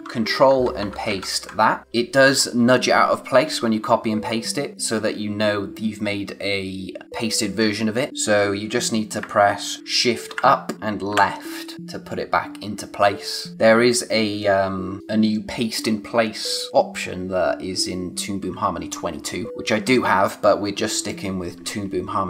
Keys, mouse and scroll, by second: 0.5 ctrl+z, 1.8 v, 9.1 shift+Num_Lock, 10.2 Up, 11.1 Left.